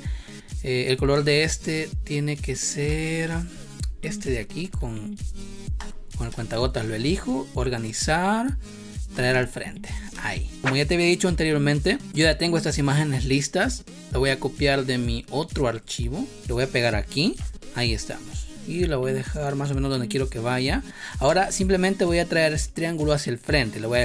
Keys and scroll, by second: 2.8 space, 6.4 space, 6.9 v, 10.0 space, 10.7 space, 16.4 ctrl+c, 17.1 ctrl+v, 21.2 space.